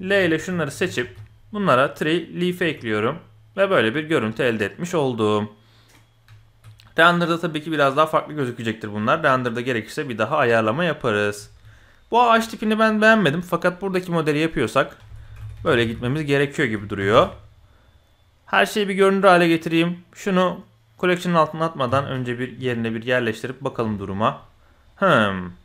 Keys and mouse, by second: 0.0-1.0 typing, 2.6 Tab, 3.1-3.6 drag, 3.9 click, 6.2 z, 7.7-8.9 middle drag, 9.1-10.4 middle drag, 10.7 middle click, 11.3 z, 14.7-17.1 drag, 15.8 e, 18.6 click, 21.8 KP_7, 22.5 g, 23.8-24.1 drag, 24.4 middle click, 24.9 click, 25.5 click.